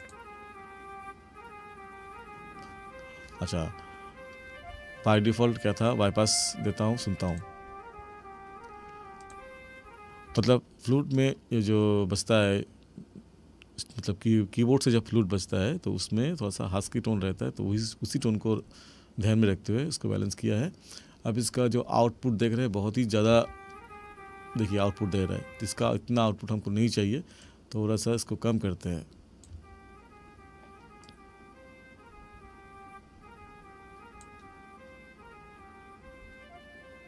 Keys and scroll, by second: 10.2 space, 23.3 space, 25.8 space, 29.5 space.